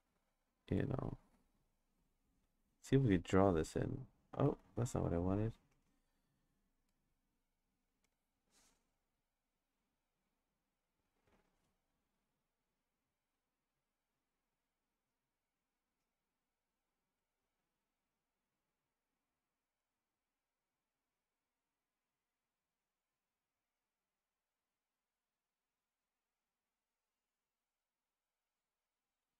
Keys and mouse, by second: 3.3 click, 4.4 ctrl+z, 9.4-11.4 drag, 12.5-15.7 drag, 16.5-19.8 drag, 20.8 click, 22.3-27.8 drag, 28.5 click.